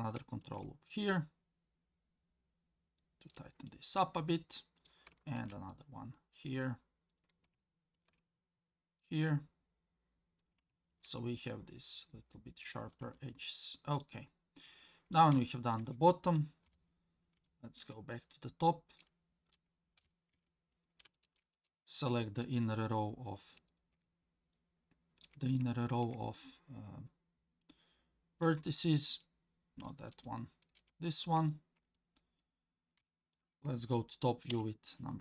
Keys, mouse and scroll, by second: 0.4 ctrl+r, 3.7-4.9 middle drag, 5.4 ctrl+r, 7.9 ctrl+r, 13.0 Tab, 13.5-14.0 middle drag, 14.2 scroll down 2, 14.7-15.1 middle drag, 15.4-15.7 shift+middle drag, 16.7 KP_1, 17.5-17.8 shift+middle drag, 18.1-19.0 middle drag, 20.0 KP_1, 20.3 Tab, 21.1 shift+middle click, 21.5 middle click, 23.7 alt+click, 24.8-25.3 scroll up 2, 25.6 alt+click, 27.1-28.4 middle drag, 28.7-29.2 scroll up 2, 29.2 middle click, 30.2 middle click, 31.4 alt+click, 31.9 middle click, 32.6 scroll down 1, 33.1 shift+middle click, 34.5 KP_7.